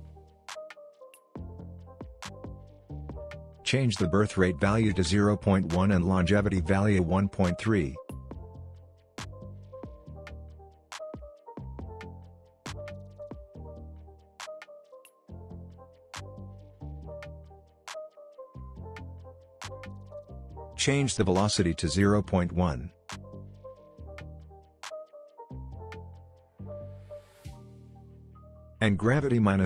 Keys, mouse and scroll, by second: 0.8 click, 6.5 Return, 8.1-8.5 scroll up 1, 8.5-9.1 scroll down 1, 10.8-13.3 drag, 19.2 Return, 20.8 click, 23.6 click, 25.7 Return, 27.1 click.